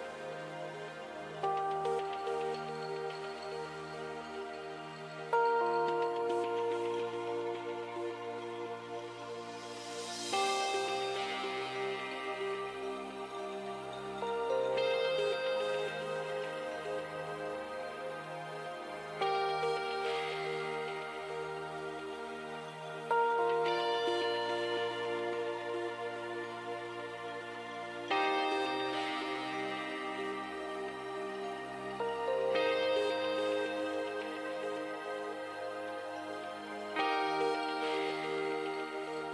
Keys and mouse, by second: 1.2 e, 4.4-7.4 drag, 5.1 g, 8.6-11.2 drag, 8.9 g, 12.8-16.6 drag, 14.2 e, 17.0 e, 21.7 e, 23.1 e, 24.0 e, 25.4 e, 27.0 e, 29.6 e, 30.7 e, 31.8 e, 33.0 e, 34.0 e, 35.7 e, 38.3 e.